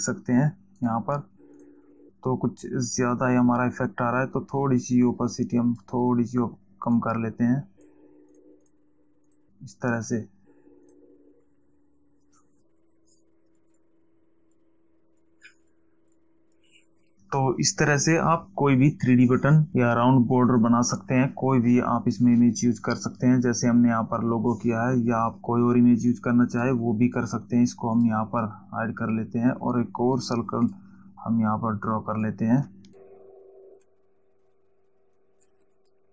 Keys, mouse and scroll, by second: 5.4 click, 7.5 click, 8.6 click, 9.6 click, 11.2 click, 13.9 click, 14.9 click, 16.0 click, 26.6 click, 31.2 click, 32.7 click, 34.7 click.